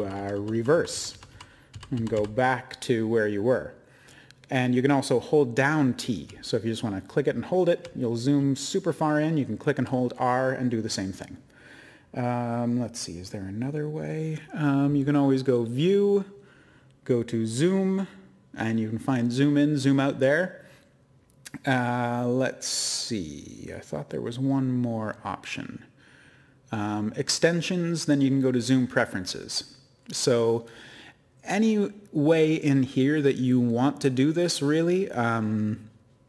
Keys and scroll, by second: 0.0-0.3 typing, 2.5-3.5 typing, 6.7-9.6 typing, 15.0-15.8 typing.